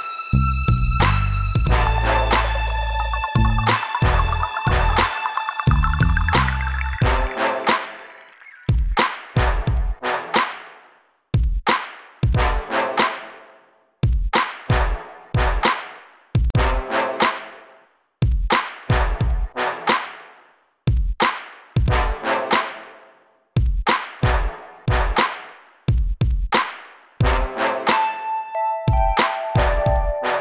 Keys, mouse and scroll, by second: 0.0 click, 1.2 click, 3.0 click, 4.1 click, 4.2 click, 5.3 click, 8.6 click, 8.8 click, 11.5 scroll down 2, 12.6 right click, 14.0 click, 14.1 click, 16.0 click, 16.1 click, 16.9 click, 18.0 click, 19.1 click, 19.5 click, 21.4 click, 21.5 click, 22.1 middle click, 22.6 scroll down 1, 29.7 Return.